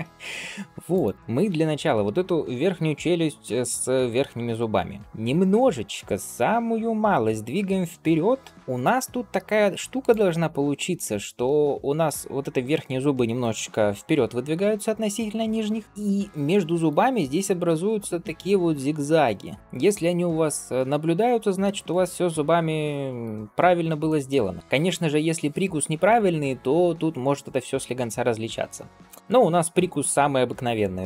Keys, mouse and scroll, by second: 0.8 click, 1.1-1.8 scroll down 2, 10.4 scroll up 1, 16.7-19.6 drag, 19.6 d, 21.7-23.1 right drag, 23.1 d, 23.5 scroll down 2, 23.9 shift+middle click, 24.6 ctrl+s.